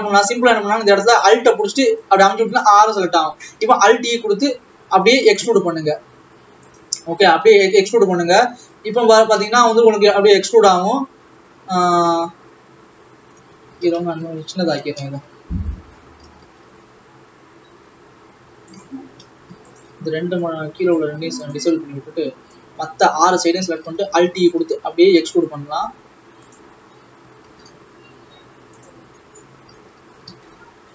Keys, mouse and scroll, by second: 2.1 alt+click, 2.9 scroll down 2, 4.0 alt+e, 7.9 click, 10.3 s, 14.0 ctrl+z, 14.3 ctrl+z, 14.5 ctrl+z, 15.2 a, 15.8 s, 19.0 scroll up 2, 19.9 shift+click, 24.5 alt+e, 27.2 a, 27.5 s, 29.7 alt+a, 30.4 ctrl+z, 30.5 ctrl+z.